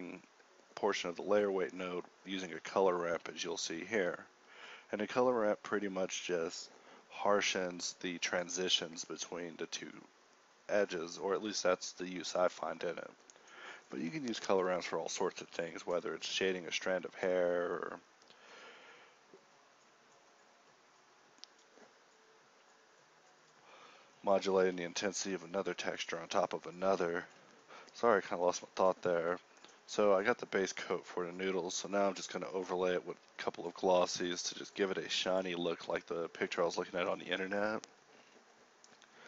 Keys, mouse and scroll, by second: 0.6 g, 1.8 g, 2.0 shift+a, 4.7 g, 13.2 ctrl+c, 13.2 ctrl+v, 17.7 g, 18.4 g, 18.5 shift+a, 21.2 shift+a, 34.7-36.3 typing.